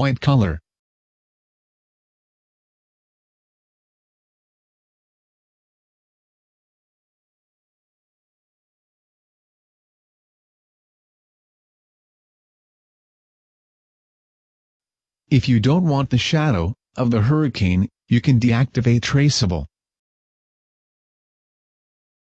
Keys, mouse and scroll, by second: 0.2 click, 17.0 Escape, 20.8 click, 20.8 scroll down 7.